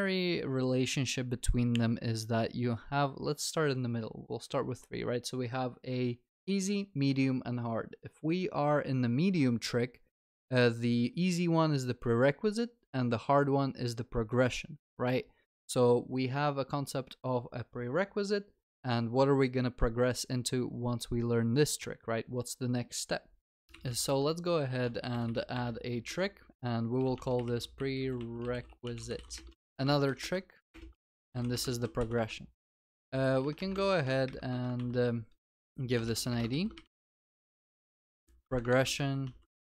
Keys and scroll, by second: 24.2 Tab, 25.5 Return, 29.6 ctrl+v, 30.7 ctrl+BackSpace, 31.8 ctrl+s, 32.6 ctrl+c, 32.9 ctrl+v, 34.7 ctrl+w, 35.5 Return, 36.5 Return, 36.5 ctrl+s, 37.4 ctrl+c.